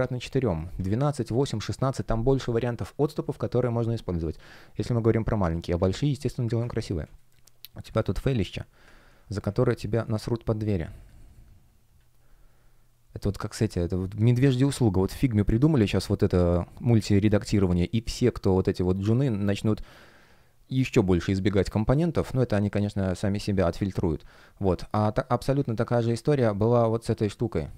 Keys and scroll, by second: 6.9 space, 8.9 super+\, 9.5 super+\, 22.4 space, 25.6 space.